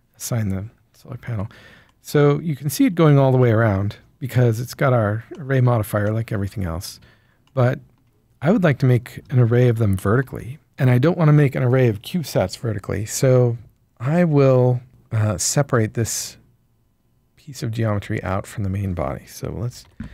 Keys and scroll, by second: 0.9 Tab, 18.0 Tab, 19.8 ctrl+l.